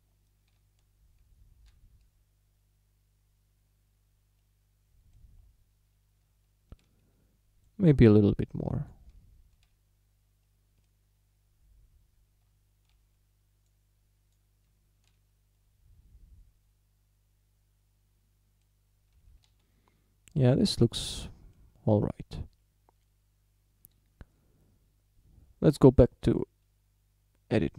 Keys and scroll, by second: 0.6 z, 6.2 Tab, 9.2 Tab, 12.5 Tab, 14.7 Tab, 19.6 shift+d, 24.4 Tab.